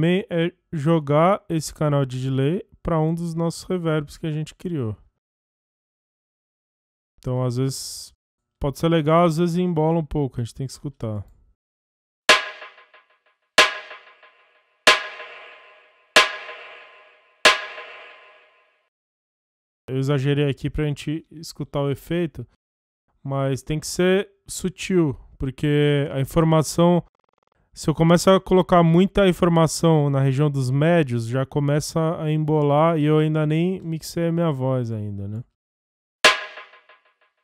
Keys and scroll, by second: 10.9 space, 17.7 space, 35.8 space.